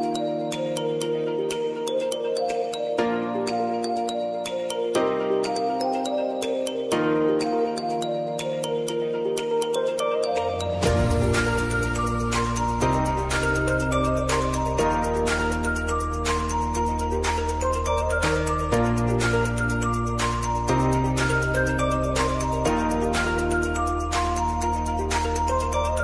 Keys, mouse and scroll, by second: 0.9 j, 1.2 space, 5.5 space, 6.1 j, 6.3 space, 11.1 space, 13.0-15.3 drag, 15.3 n, 15.7 space, 20.8 space, 21.2 click, 21.7 space.